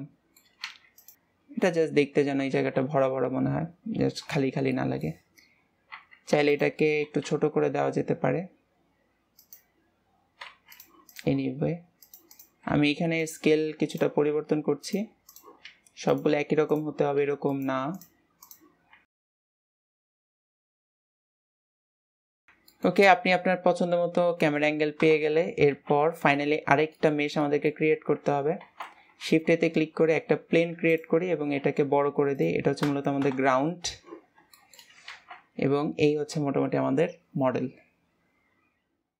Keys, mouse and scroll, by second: 0.6 Tab, 1.0 click, 1.1 KP_0, 2.5 ctrl+s, 4.7-5.9 shift+middle drag, 5.9 Tab, 6.2 Tab, 6.4 click, 11.0 click, 12.3 click, 13.8 click, 15.2 click, 16.6 click, 17.9 drag, 18.4 drag, 18.8 s, 20.3 click, 20.5 ctrl+s, 22.6-24.9 middle drag, 24.9 KP_0, 25.7 ctrl+s, 26.4-28.6 shift+middle drag, 28.6 ctrl+s, 29.2 shift+a, 31.2-31.5 scroll down 4, 31.5 s, 33.2 KP_0, 34.5 shift+middle click, 35.1 ctrl+s, 35.4-38.4 scroll up 1.